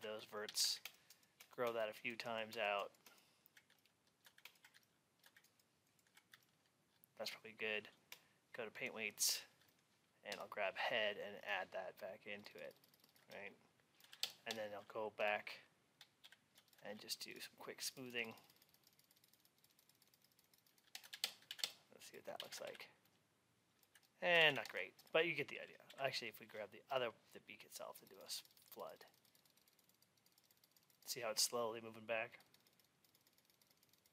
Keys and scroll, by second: 21.4 alt+x.